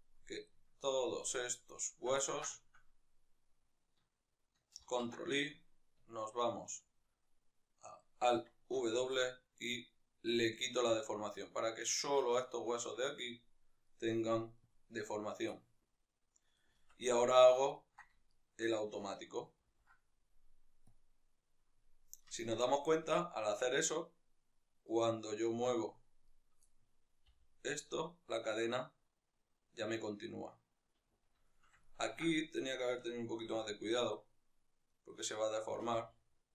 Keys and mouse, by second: 1.2 shift+right click, 2.0-11.7 ctrl+middle drag, 4.5 ctrl+i, 10.2 alt+w, 11.7 right click, 12.4-13.7 right drag, 16.6 Tab, 16.6 middle click, 17.1 right click, 17.5-18.0 ctrl+middle drag, 18.0-20.8 shift+right drag, 20.8 ctrl+p, 22.1-24.6 ctrl+middle drag, 24.6-25.3 right drag, 25.3 Tab, 26.0 right click, 26.4-30.7 middle drag, 27.1 g, 30.7 right click, 31.2-32.3 shift+middle drag, 32.3-33.3 right drag, 33.3 g, 35.2 right click, 35.8 g.